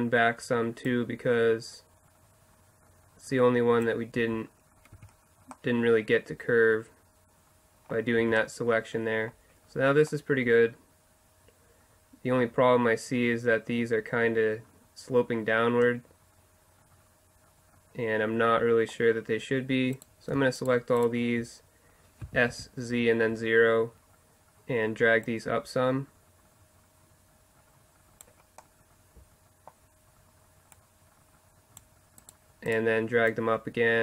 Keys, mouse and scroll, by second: 0.4 middle click, 0.9-2.7 drag, 4.2 z, 4.8 middle click, 5.0 Tab, 8.3 Tab, 8.4-9.8 middle drag, 10.4 middle click, 12.6-14.8 middle drag, 15.8-17.6 middle drag, 20.0-22.8 middle drag, 22.2 s, 25.3-27.0 drag, 28.6 middle click, 30.8-32.3 drag, 32.3-34.0 middle drag.